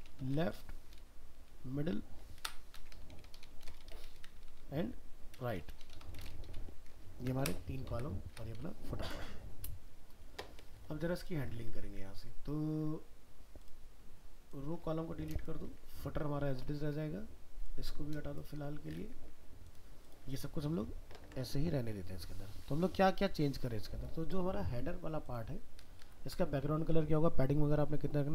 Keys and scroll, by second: 6.9 ctrl+s, 21.2 ctrl+s.